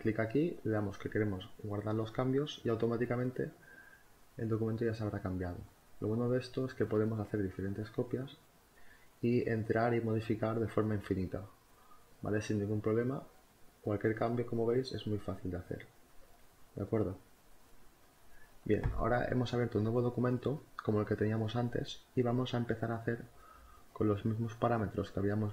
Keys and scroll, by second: 15.4 z, 17.8 space.